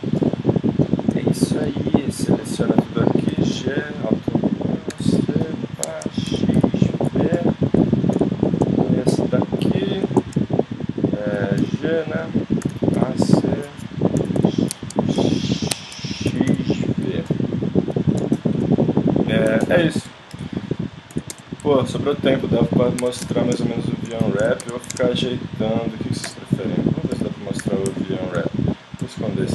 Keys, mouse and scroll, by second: 0.9 middle click, 1.1 middle click, 3.3 g, 4.9 a, 5.1 c, 6.3 x, 7.4 middle click, 11.1 right click, 11.6 g, 12.6 a, 13.0 c, 15.2 x, 16.4 x, 17.3-20.4 middle drag, 20.4 alt+h, 21.1 a, 21.3 Tab, 22.7-23.7 middle drag, 23.0 Tab, 24.5 middle click, 24.7 Tab, 26.3 Tab, 27.1 a, 27.6 a, 29.0 l.